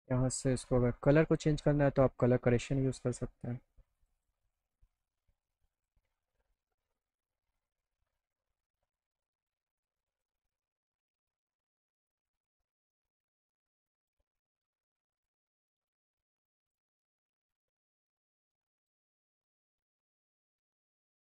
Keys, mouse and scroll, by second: 2.8 click, 3.9 click, 4.2 click, 5.8 click, 9.8 click, 12.0 click, 13.3 click, 15.2 click, 16.4 click, 18.8 click, 19.4 click, 20.9 click.